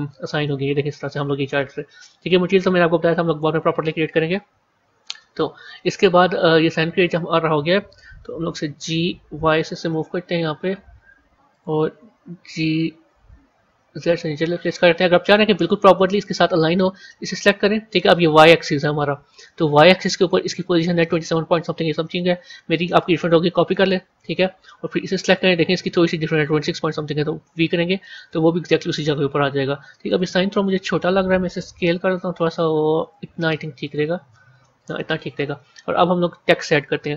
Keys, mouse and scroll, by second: 0.3-3.4 middle drag, 5.1 KP_1, 5.5 KP_3, 8.3 g, 13.1 g, 17.1 click, 19.6 click, 20.9-23.9 drag, 25.0 click, 26.4-29.3 drag, 29.3 a, 30.0 click, 31.5 s, 34.5-35.8 middle drag, 35.8 KP_1, 36.1 KP_3.